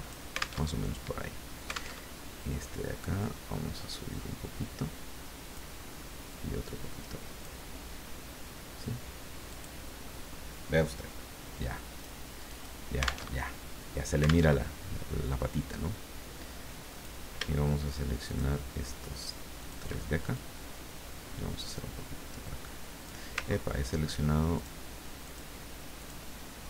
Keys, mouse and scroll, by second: 0.7 alt+Tab, 2.1 alt+Tab, 3.2-5.7 drag, 6.3-7.6 drag, 9.5 click, 11.9 click, 12.4 click, 13.3 alt+Tab, 14.5 alt+Tab, 16.9 click, 18.3 shift+click, 19.6 shift+click, 20.3-23.3 shift+drag, 23.5 ctrl+scroll up 2, 24.5 ctrl+click, 25.2 click, 26.0 click.